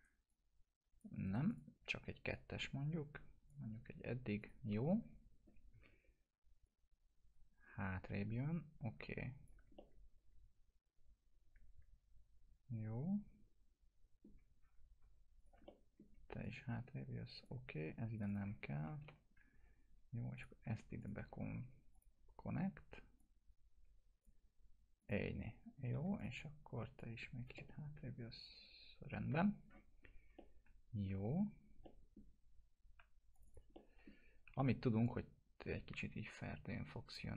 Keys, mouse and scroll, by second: 0.0 right click, 0.3-1.2 click, 1.3 right click, 1.5-3.6 drag, 5.7 w, 6.7-9.8 drag, 9.8-14.5 alt+middle drag, 15.1 1, 15.4 click, 15.7-16.3 alt+middle click, 16.4-17.7 click, 17.7 2, 18.2 click, 19.0 ctrl+BackSpace, 20.4 click, 21.0 shift+click, 21.9-24.4 drag, 25.9 1, 26.2 click, 27.6-29.6 alt+middle drag, 29.6-30.1 scroll down 2, 30.4-31.3 alt+middle drag, 31.9 middle click, 33.0 2, 33.4 click, 33.8 middle click, 34.3 scroll down 1, 34.5 e, 35.1-37.2 drag.